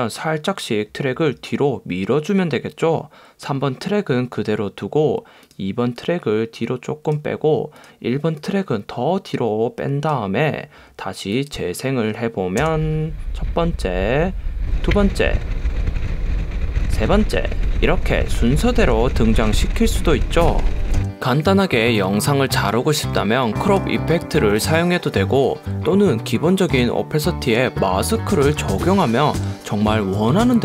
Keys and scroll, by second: 12.8 space, 23.9 BackSpace.